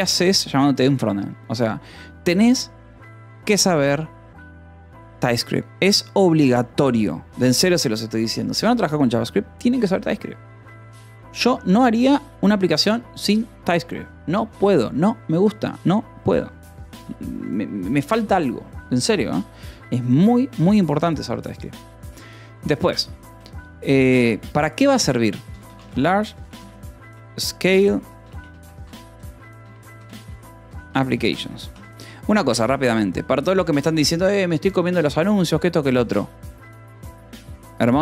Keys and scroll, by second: 24.0 shift+l, 25.1-31.7 typing, 32.2 ctrl+s.